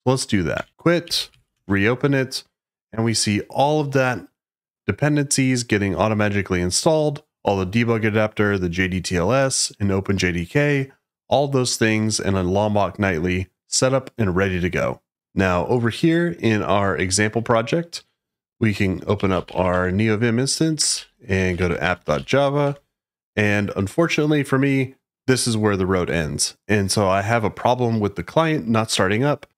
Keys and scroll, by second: 0.3-1.6 typing, 18.8-22.7 typing.